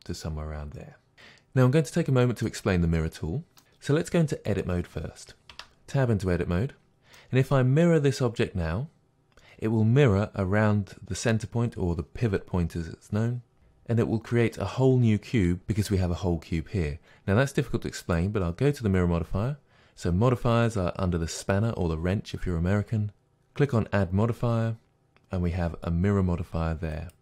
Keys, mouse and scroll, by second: 5.5 Tab, 18.1 click, 23.1-27.2 drag.